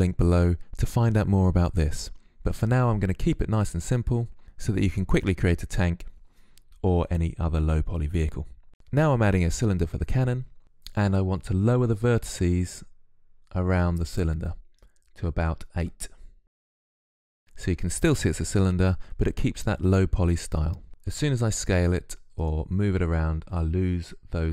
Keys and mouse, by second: 8.7-10.2 drag, 8.7 shift+a, 14.6-20.9 drag, 20.9 s.